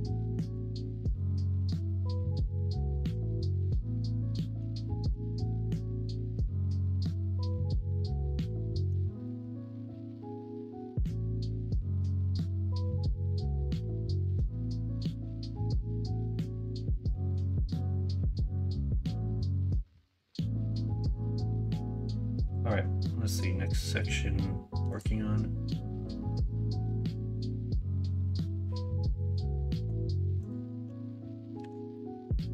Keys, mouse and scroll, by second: 0.3 middle drag, 0.8 shift+middle drag, 1.8-3.7 middle drag, 4.2 middle drag, 4.8 shift+middle drag, 5.5 middle click, 8.6 middle click, 9.1 shift+middle drag, 9.7-12.3 middle drag, 16.3 middle drag, 16.9 shift+middle click, 17.3-18.7 middle drag, 19.0 shift+middle drag, 19.5-20.2 middle drag, 20.8 shift+middle drag, 29.7 middle click, 31.5 /, 31.9-32.5 middle drag.